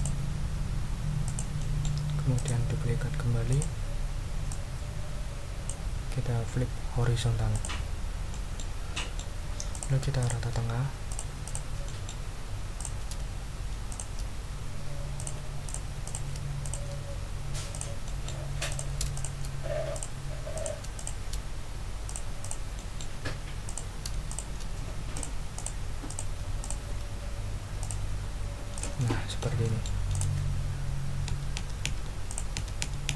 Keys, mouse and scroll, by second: 1.2 click, 1.6 click, 2.3 right click, 3.5 click, 4.5-5.8 ctrl+drag, 7.5 ctrl+click, 8.0 ctrl+scroll down 2, 8.3 ctrl+middle click, 8.9 ctrl+middle click, 9.7 click, 10.2 shift+click, 11.1 click, 11.4 click, 11.8 click, 12.8 click, 13.9 shift+click, 15.2 click, 15.6 click, 16.0 click, 16.6 shift+click, 17.7 click, 18.0 middle click, 18.7 click, 19.1 shift+click, 19.9 click, 20.5 shift+click, 20.9 shift+click, 22.1 click, 22.4 click, 22.7 click, 23.6 click, 24.3 shift+click, 25.1 click, 25.5 click, 26.1 click, 26.6 shift+click, 27.8 click, 28.7 double click, 30.1 click, 31.3 Right, 32.3 click, 32.6 Right.